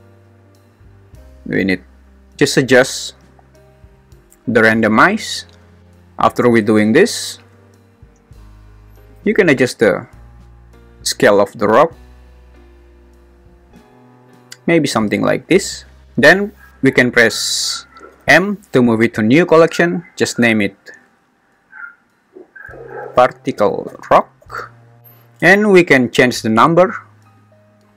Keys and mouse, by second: 5.0 middle click, 9.2-14.2 drag, 18.1 m, 27.5 click.